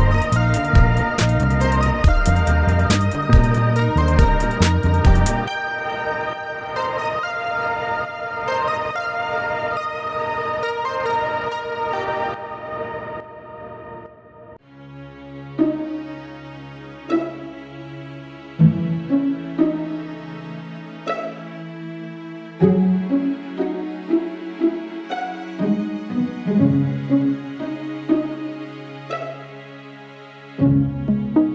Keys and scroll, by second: 0.9 ctrl+f, 2.1 ctrl+r, 2.3 Escape, 2.9 ctrl+e, 7.6 ctrl+f, 8.6 ctrl+1, 9.2 ctrl+r, 9.9 Escape, 10.6 ctrl+e, 17.0 ctrl+e, 26.6 ctrl+e, 31.0 ctrl+e.